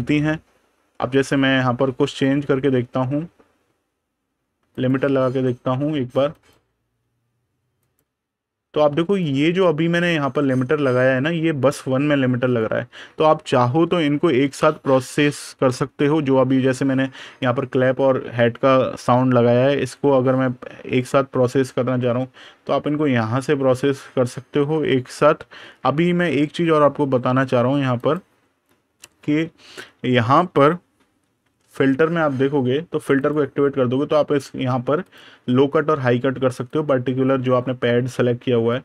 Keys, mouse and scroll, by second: 1.0 click, 3.1 super+KP_Subtract, 4.6 click, 8.5 super+KP_Subtract, 8.9 click, 9.3 super+KP_Add, 12.3 click, 13.7 super+KP_Subtract, 27.8 click, 33.0 click.